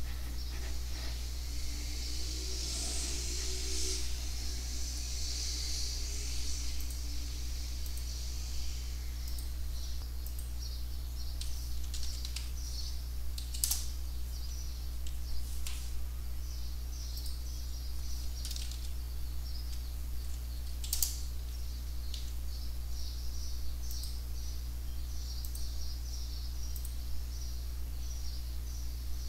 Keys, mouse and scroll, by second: 0.5 Up, 0.5 Return, 0.8 scroll up 2, 1.3 scroll down 2, 1.4 click, 2.0 click, 2.2-4.4 typing, 4.6 click, 4.7 click, 5.0 click, 5.6 click, 10.2 click, 11.5-12.8 typing, 13.2 Down, 13.4 Up, 13.6 Return, 17.1 click, 18.2-19.2 typing, 20.2 Down, 20.7 Up, 20.9 Return, 22.1 ctrl+s, 23.9 click, 25.4 click, 26.7 click.